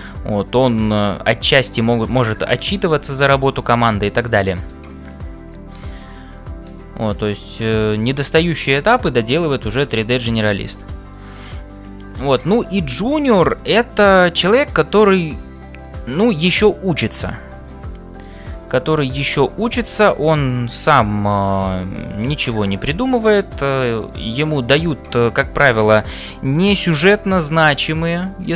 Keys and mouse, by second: 1.1 click, 2.1 click, 2.7 g, 5.1 click, 7.8 f, 10.5 g, 11.8 click, 12.6 click, 13.3 g, 15.9 middle click, 17.3 e, 18.7 click, 21.0 click, 21.6 f, 22.8 g, 24.7 g.